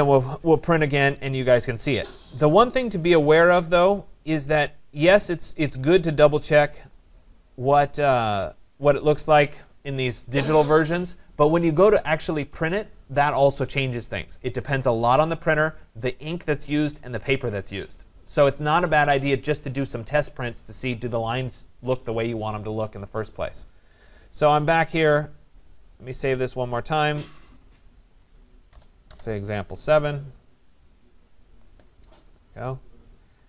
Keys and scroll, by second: 28.7 BackSpace.